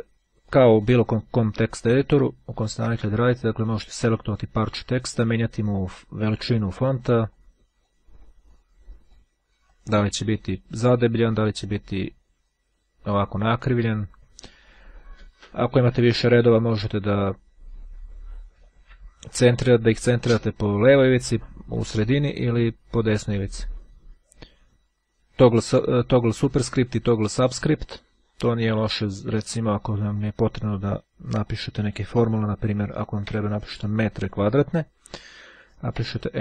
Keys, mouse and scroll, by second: 0.0-1.5 drag, 2.4-2.9 ctrl+scroll up 1, 2.9 ctrl+scroll up 1, 3.6 click, 6.8-8.4 drag, 8.8-9.8 drag, 10.8 click, 12.6-14.0 drag, 27.9-28.5 scroll up 2, 28.5 click, 29.8-30.2 scroll down 2, 30.2 click, 33.4 m.